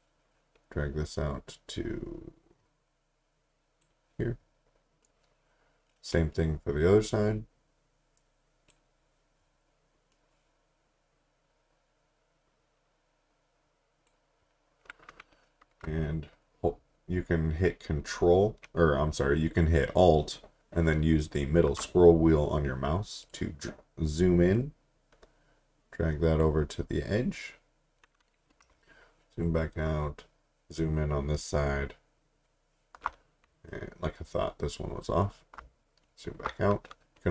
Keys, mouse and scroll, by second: 16.2 alt+scroll up 1, 23.2 click, 28.8 alt+scroll down 1, 30.2-31.6 alt+scroll up 7, 32.1 alt+scroll up 1, 33.7 click, 35.7 alt+scroll down 1, 36.6-37.3 scroll down 1.